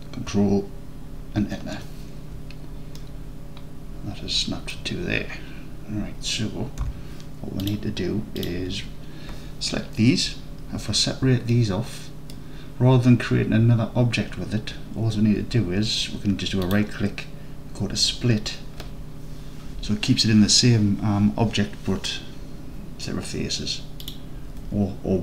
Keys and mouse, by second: 1.4 ctrl+KP_Enter, 3.0-4.7 alt+drag, 6.9 3, 11.5 alt+click, 11.7 alt+click, 12.3 alt+click, 16.7-24.1 drag.